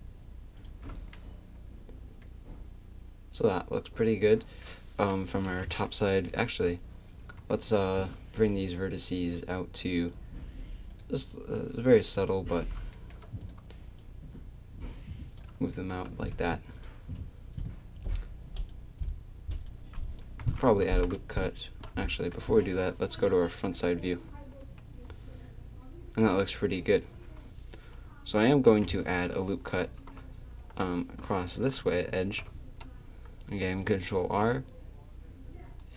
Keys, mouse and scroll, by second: 0.6 middle click, 5.0 middle click, 5.5 KP_7, 8.7 click, 8.8-10.1 middle drag, 10.1 right click, 12.9 middle click, 14.0-15.1 middle drag, 20.0 click, 20.4 a, 24.6 KP_1, 28.7 KP_7, 32.1 ctrl+r.